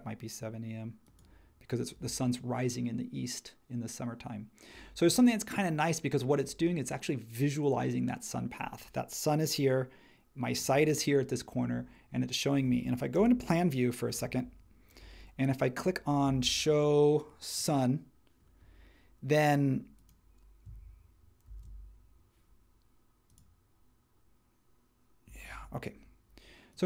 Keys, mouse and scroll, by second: 13.1 space, 14.2 super+1, 21.5 shift+x.